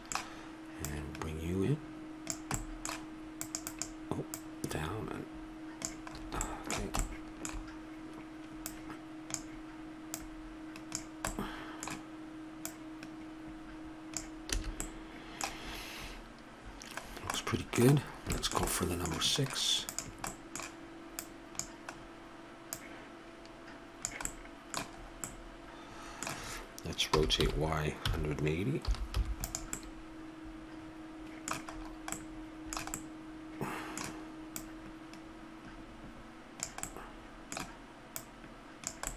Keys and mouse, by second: 0.8-2.5 drag, 2.5 middle click, 3.4 middle click, 4.3-6.1 drag, 6.1 middle drag, 8.6-11.3 drag, 11.3-14.1 middle drag, 14.1 click, 14.5 a, 19.8-22.7 right drag, 22.7-24.6 drag, 27.1 r, 34.5-36.3 middle drag, 36.3 click, 36.9-38.1 middle drag, 38.1-39.1 drag.